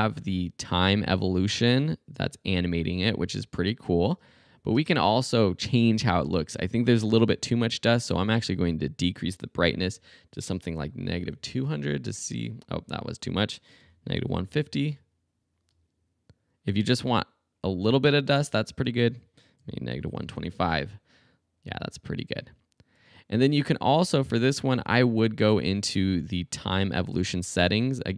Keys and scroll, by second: 4.8 space, 9.8 -, 10.9-11.8 typing, 13.6-15.7 typing, 18.5 space, 19.6-20.7 typing.